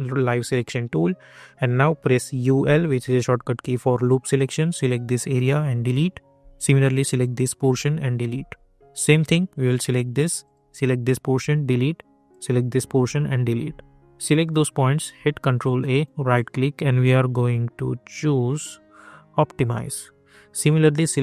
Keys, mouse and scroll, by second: 1.3 scroll up 1, 2.1-3.0 typing, 3.4 click, 6.8 click, 9.2 click, 15.1 ctrl+a, 15.9 right click, 19.5 click.